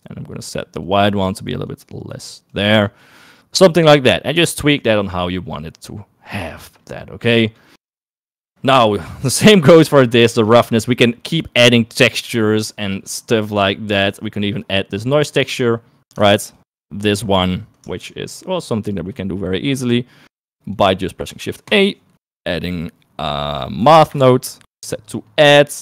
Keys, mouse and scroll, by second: 0.7 click, 1.3 click, 6.7 click, 6.9 click, 8.5 middle click, 13.4 middle click, 16.7 ctrl+shift+click, 18.5 ctrl+shift+click, 18.8 middle click, 19.6-20.8 drag, 21.5 shift+a.